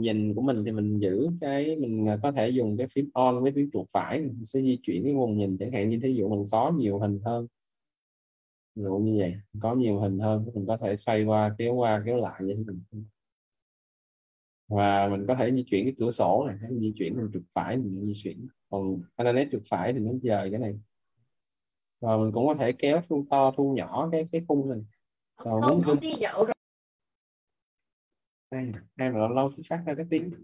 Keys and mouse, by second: 7.8 alt+right click, 13.1 click, 15.6 alt+right click, 25.0 click.